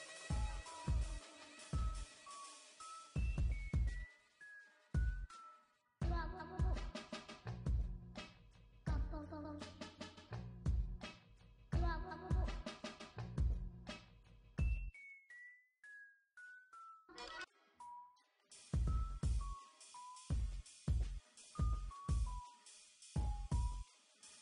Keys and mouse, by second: 0.7 ctrl+r, 1.5 ctrl+r, 3.2 ctrl+r, 4.0 ctrl+r, 5.0 ctrl+r, 6.0 ctrl+r, 8.7 ctrl+r, 9.4 ctrl+r, 10.3 ctrl+r, 11.4 ctrl+r, 12.2 ctrl+r, 13.2 ctrl+r, 14.1 ctrl+r, 15.0 ctrl+r, 15.5 ctrl+r, 16.9 ctrl+r, 17.7 ctrl+r, 19.3 ctrl+r, 20.0 ctrl+r, 21.6 ctrl+r, 22.5 ctrl+r, 24.1 ctrl+r.